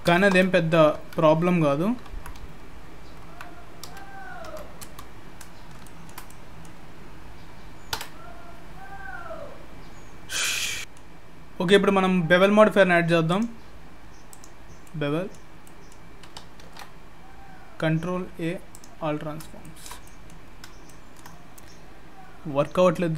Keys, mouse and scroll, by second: 5.5 scroll down 2, 5.8 shift+middle click, 6.3 middle click, 7.9 Tab, 10.5-13.0 scroll down 3, 10.8 middle click, 10.8-13.0 scroll up 4, 13.3 click, 14.8 middle click, 16.6 ctrl+a, 19.1 scroll up 3, 19.6 shift+middle click, 20.0 middle click, 20.4-20.9 scroll up 2, 20.9 shift+middle click, 21.4-22.3 scroll up 3, 22.3-23.0 scroll down 1, 23.0-23.1 scroll down 1.